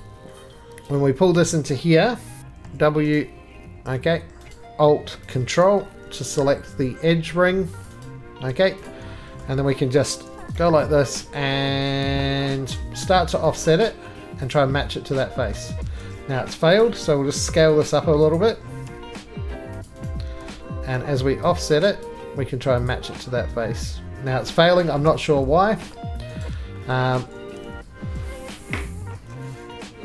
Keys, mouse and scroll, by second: 0.0 click, 1.2 scroll, 1.6 shift+middle click, 1.6 click, 2.1-3.1 typing, 2.4 click, 3.2 right click, 4.5 right click, 4.6 click, 4.6 right click, 4.6 2, 5.4 click, 7.8 click, 8.0 right click, 8.5 3, 8.9 click, 9.4 middle click, 10.3 o, 10.4 click, 10.6 right click, 11.1 click, 11.9-12.5 scroll, 12.2 middle click, 12.5 middle click, 13.8 click, 14.5 click, 15.6 middle click, 15.8 ctrl+z, 16.3 3, 16.8 click, 17.3 4, 17.9 click, 18.4 click, 18.8 s, 18.8 s, 19.8 click, 20.1 right click, 20.5 3, 20.6 click, 22.0 click, 22.9 click, 24.5 middle click, 25.0 shift+middle click, 25.9 middle click, 26.4 right click, 26.9 middle click, 27.6 ctrl+z, 27.6 click, 28.3 middle click, 28.8-30.0 scroll.